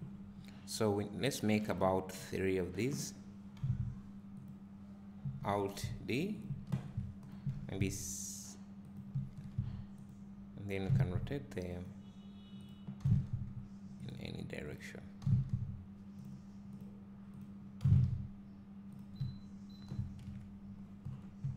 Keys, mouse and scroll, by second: 1.4-4.4 drag, 2.2-3.6 scroll up 1, 3.6 g, 10.0 click, 10.8 r, 12.7 click, 13.0 r, 14.1 click, 15.2 r, 17.8 r, 20.2 KP_Decimal.